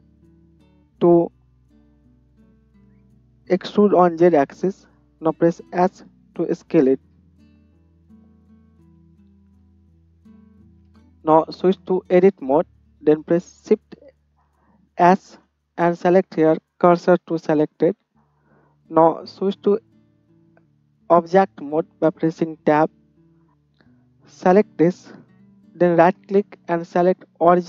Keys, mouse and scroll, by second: 4.8-9.2 middle drag, 6.0 s, 8.3 Tab, 9.1 shift+z, 9.6 click, 11.0 Tab, 15.2 shift+s, 22.5 Tab, 23.5 right click, 24.6-26.7 drag, 26.7 right click, 27.2 drag, 27.5-27.6 right drag.